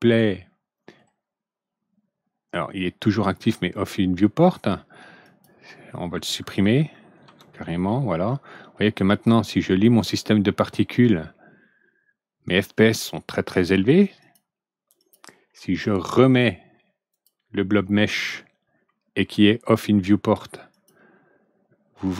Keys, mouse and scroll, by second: 5.2 click, 7.1 ctrl+d, 14.1 click, 14.9 click, 17.1 click, 20.7 click.